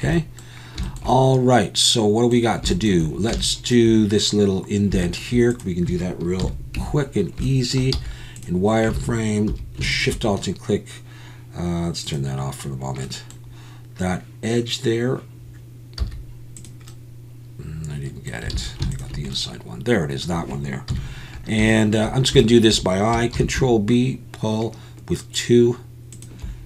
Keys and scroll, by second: 6.4 KP_1, 6.8 Tab, 7.9 z, 9.0 alt+a, 9.5 2, 16.0 z, 18.5 alt+a, 20.9 KP_1, 23.3 ctrl+b.